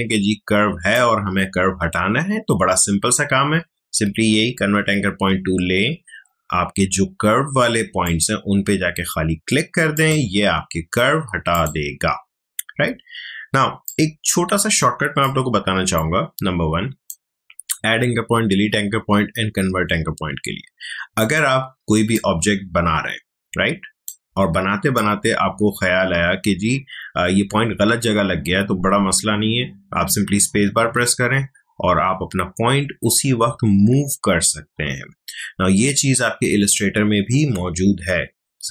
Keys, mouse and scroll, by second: 13.8-19.5 drag, 21.2-30.4 drag, 30.4 space.